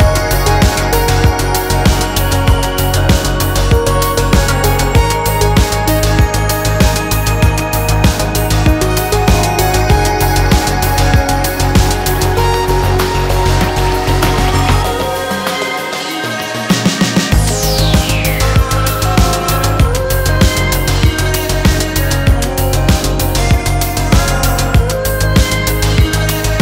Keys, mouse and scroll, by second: 1.2-6.2 drag, 7.6-10.3 drag, 10.5 middle click, 12.4-16.9 drag, 17.8 click, 19.9-24.9 drag, 25.3-26.6 drag.